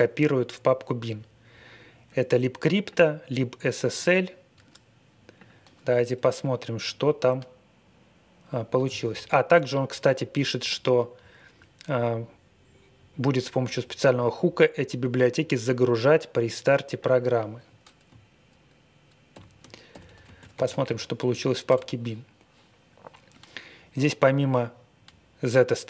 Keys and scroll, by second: 19.3 ctrl+l, 19.6-21.6 typing.